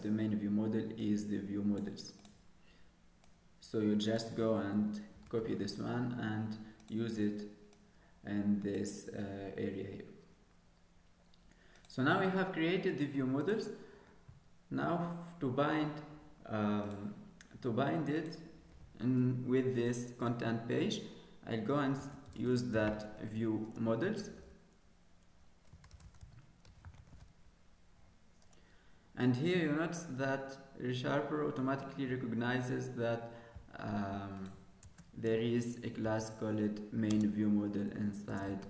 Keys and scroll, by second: 34.8 ctrl+space.